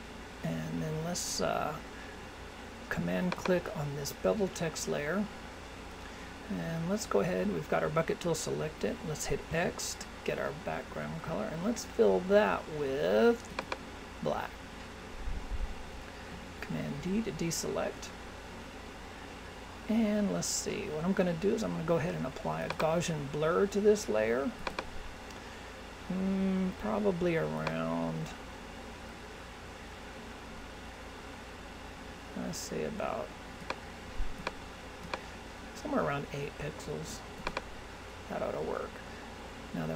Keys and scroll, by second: 16.6 super+d.